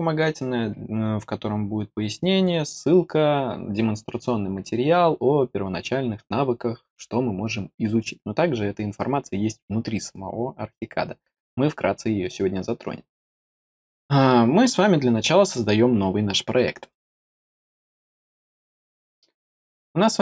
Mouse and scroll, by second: 16.8 click.